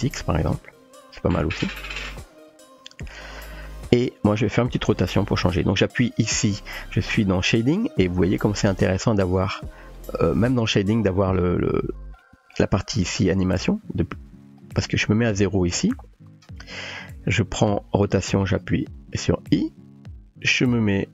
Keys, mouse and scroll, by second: 9.8 click, 11.0 click, 12.2 middle click, 14.6-15.4 drag, 19.6 i, 21.0-21.1 drag.